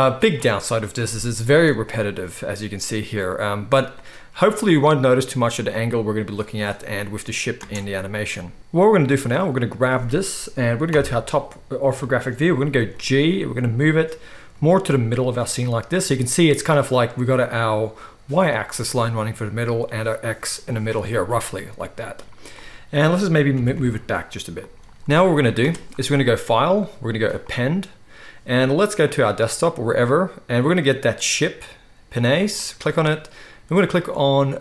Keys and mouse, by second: 7.6 space, 8.6 z, 8.6 x, 9.4-12.2 right drag, 10.8 KP_7, 12.2-21.7 shift+middle drag, 12.8 g, 21.7 drag, 21.8 middle click, 21.9 click, 22.2-26.4 right drag, 23.5 g, 24.9 KP_1, 26.4-28.9 middle drag, 28.9-34.6 drag.